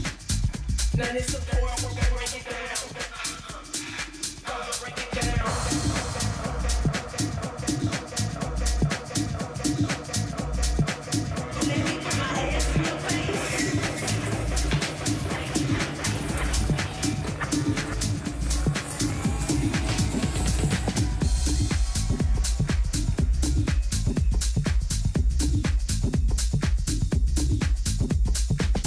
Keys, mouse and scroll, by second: 2.2 ctrl+b, 23.1-25.4 middle drag, 24.7 a, 25.8-28.8 middle drag, 25.8 z.